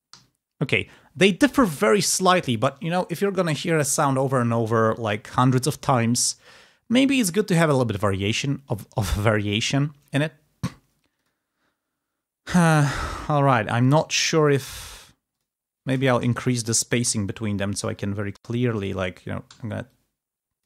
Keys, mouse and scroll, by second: 0.4 g, 0.5 click, 5.1 g, 11.1 click, 15.2 ctrl+click, 15.7 ctrl+s, 15.8 ctrl+shift+right click, 16.3 ctrl+shift+scroll down 2, 17.0 ctrl+t, 17.1-18.5 ctrl+drag, 18.6 click, 19.4 t, 19.7 click.